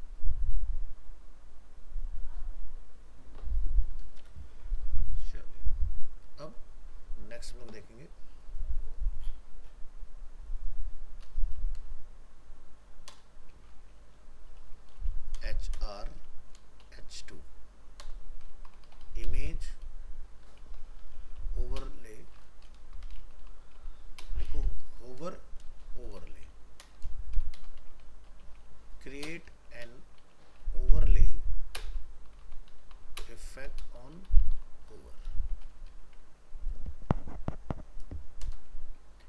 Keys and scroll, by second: 4.8 ctrl+w, 22.6 ctrl+Left, 24.8 ctrl+Right, 36.3 ctrl+s.